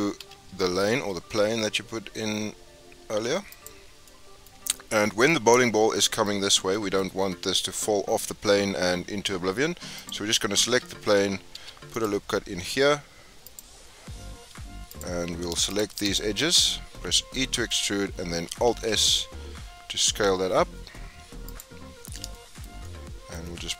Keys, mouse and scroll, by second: 3.9 scroll down 5, 4.0-4.7 middle drag, 4.7 scroll down 1, 4.8-5.4 middle drag, 5.4-5.9 scroll down 4, 5.9-6.9 middle drag, 6.9 scroll up 7, 9.5 scroll up 5, 9.9 click, 10.6 Tab, 11.5 ctrl+r, 14.9 click, 15.7 shift+click, 16.0 shift+click, 16.3-17.4 scroll down 8, 17.4 e, 18.7 alt+s, 22.3 shift+middle click, 22.6 scroll up 1, 22.8-23.7 middle drag.